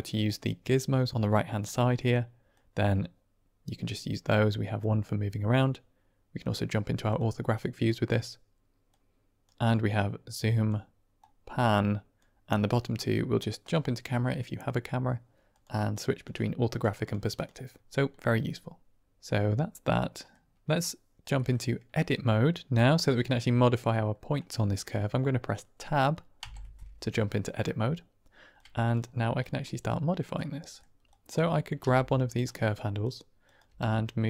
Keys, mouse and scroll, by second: 0.1-2.0 drag, 2.5-3.7 drag, 4.7 click, 6.3 click, 7.0 click, 7.7 click, 8.8 click, 9.9 click, 11.1 click, 13.5 click, 15.4 click, 15.8 click, 16.1 click, 16.6 click, 16.9 click, 17.2 click, 18.1 middle click, 19.0-20.2 middle drag, 21.3 middle click, 23.6 middle click, 26.3 Tab, 28.4 click, 29.4 click, 30.3 middle click, 31.1 click, 31.4 middle click, 31.7 g, 32.2 click, 32.8 click, 33.3 click, 33.6 g.